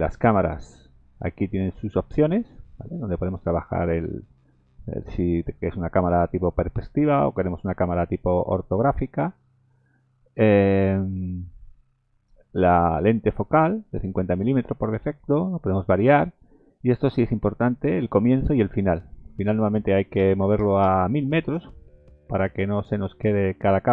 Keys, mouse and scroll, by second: 0.1 click, 2.4 click, 3.0 middle click, 5.4 middle click, 6.0-6.8 scroll up 6, 6.8 middle click, 7.4 middle click, 8.1 middle click, 9.5 scroll down 3, 16.9 scroll down 2, 19.3 click, 20.6 KP_0, 23.4 click.